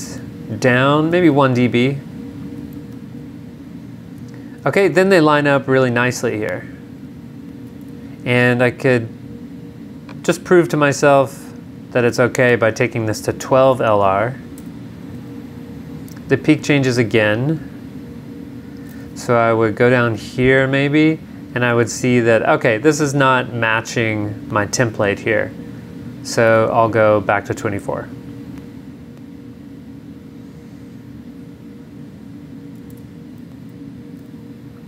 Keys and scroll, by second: 1.0 super+Up, 2.9 super+Down, 7.9 super+Tab, 13.7 super+Tab, 14.6 super+v, 19.6 super+Down, 20.5 super+Up, 26.5 super+Tab, 33.0 super+Tab, 33.6 super+v.